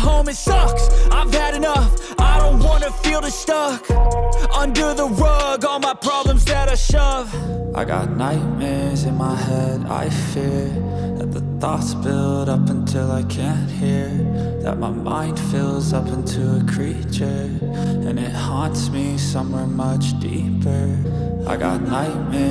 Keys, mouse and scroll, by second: 3.0 ctrl+space, 3.1 ctrl+click, 3.5 ctrl+space, 4.0 space, 9.4 double click, 10.6-16.3 typing.